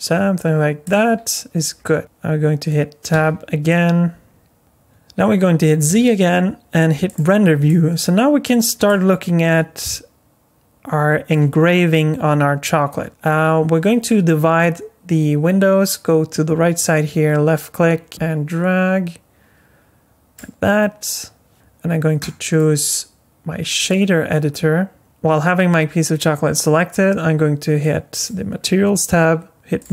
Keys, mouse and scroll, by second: 1.6-3.1 scroll down 3, 3.1 Tab, 3.7 alt+middle click, 4.6 middle click, 5.9 z, 7.7 middle click, 8.9 middle click, 16.8 click, 21.5 n, 22.2 click, 27.8 click, 29.8 click.